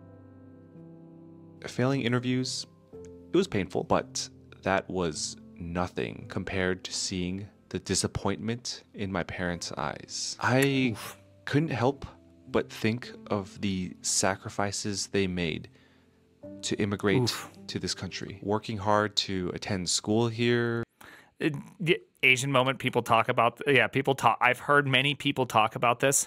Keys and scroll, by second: 22.5 alt+[.